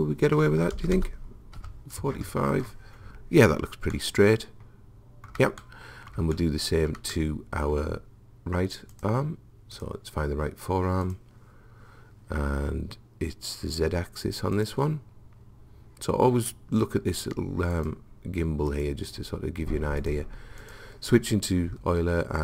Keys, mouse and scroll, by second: 1.0 BackSpace, 4.5-9.0 middle drag, 9.0-13.0 drag, 14.6 click, 17.8 click, 20.0 click, 21.8 middle click.